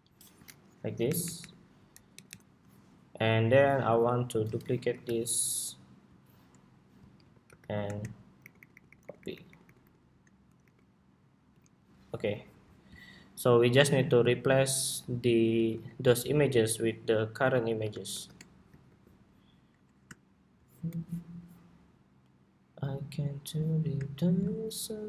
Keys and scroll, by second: 4.3 super+c, 4.5 super+v, 6.9 super+c, 7.1 super+v, 15.4 super+c, 17.8 shift+super+v, 18.5 super+2.